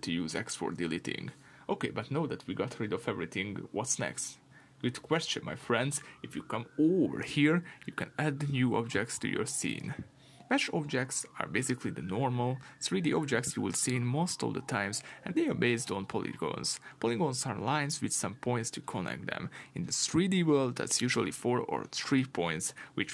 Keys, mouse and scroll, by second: 4.0 scroll up 1, 4.5-7.6 middle drag, 7.6-23.1 drag.